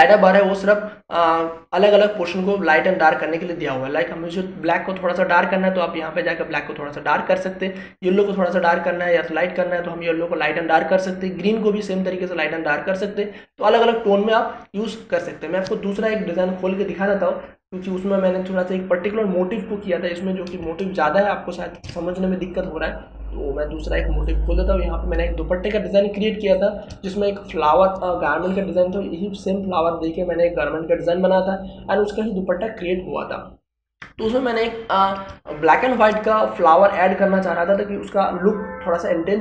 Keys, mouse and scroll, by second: 5.6-21.6 drag, 21.6 space, 21.8-25.2 ctrl+drag, 26.3 ctrl+space, 26.6 ctrl+click, 26.8 ctrl+space, 27.9 ctrl+space, 35.1 ctrl+space, 35.5-39.4 ctrl+drag.